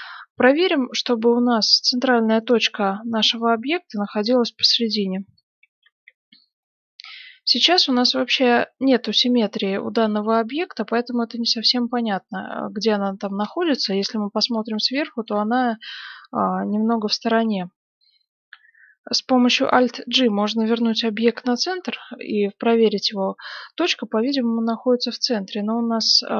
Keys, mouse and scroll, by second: 0.5-2.2 middle drag, 2.3 middle click, 2.4 right click, 4.6 KP_7, 5.8 z, 6.5-7.5 scroll up 1, 7.5-8.2 scroll down 1, 8.2-11.4 middle drag, 8.2 z, 12.3 scroll up 1, 12.4-14.9 middle drag, 13.8 KP_7, 15.0-19.8 middle drag, 19.8 alt+g, 21.2 KP_7, 24.8 middle click, 25.2-26.0 scroll down 1, 26.0-26.3 middle drag.